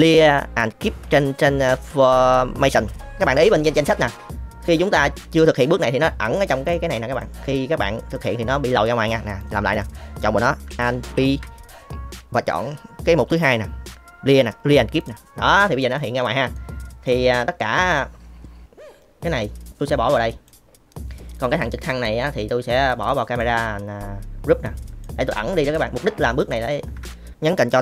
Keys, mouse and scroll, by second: 7.1 click, 9.7 click, 11.1 alt+p, 15.5 click, 16.6 middle click, 19.5 click, 21.3 click, 21.8 click, 24.7 click, 25.3-27.7 drag.